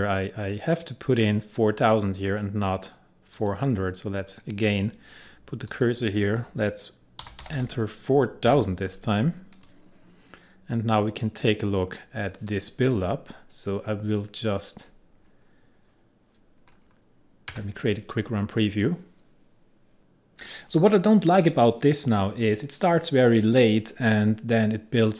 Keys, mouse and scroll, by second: 3.4 click, 5.8 click, 7.0-8.5 typing, 9.6-15.2 drag, 20.0-25.1 drag.